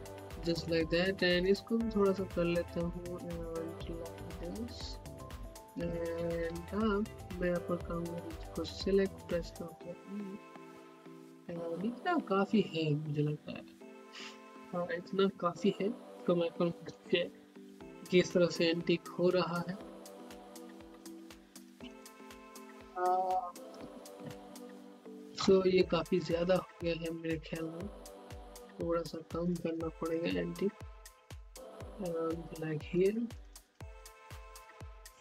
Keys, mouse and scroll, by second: 0.1 alt+middle click, 0.5 scroll up 1, 1.5-5.0 drag, 5.2 scroll up 1, 5.5 alt+middle click, 5.9 alt+click, 6.6 alt+middle click, 7.0 scroll down 1, 7.4-11.0 drag, 12.4 z, 13.5 click, 18.7-24.6 typing, 26.1 click, 26.4 scroll down 1, 26.9-30.1 drag, 30.1 ., 31.4 click, 32.4-34.4 typing.